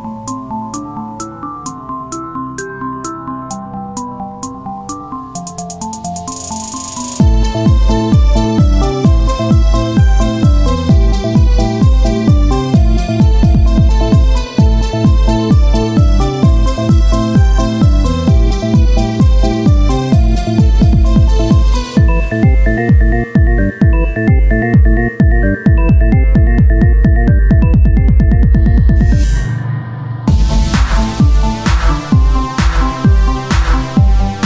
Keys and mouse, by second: 0.5 Tab, 0.5 click, 3.1 Tab, 3.6 z, 4.0 c, 6.5-8.8 drag, 8.8 Tab, 9.2 z, 10.6 Tab, 13.1-15.2 right drag, 15.2 z, 17.4-18.6 right drag, 17.4 z, 18.6 o, 19.1 g, 20.9 Tab, 24.5 Tab, 25.5 s, 27.1 click, 27.3 Tab, 28.2 Tab, 28.8 click, 29.7 z, 29.9 c, 30.6 click, 30.8 z, 31.1 middle click, 32.1 click, 32.7 KP_1, 34.3 r.